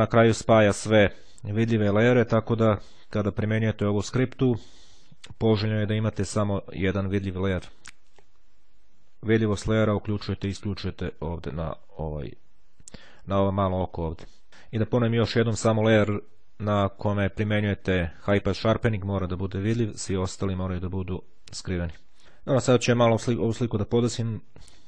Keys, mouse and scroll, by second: 7.9 click, 9.4 click, 10.6-11.6 drag, 14.1 click, 19.8-20.9 drag.